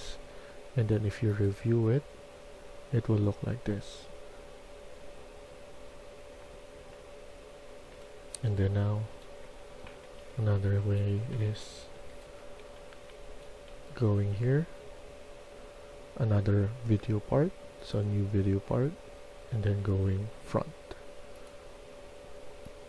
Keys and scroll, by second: 7.8-13.2 typing, 16.6-17.3 typing, 19.2 w.